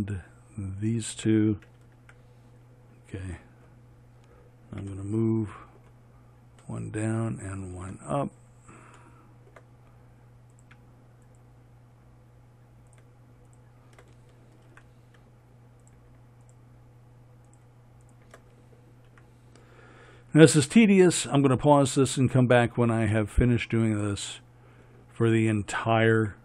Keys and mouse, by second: 2.4 f, 15.1-18.6 drag, 15.1 f, 19.5 f.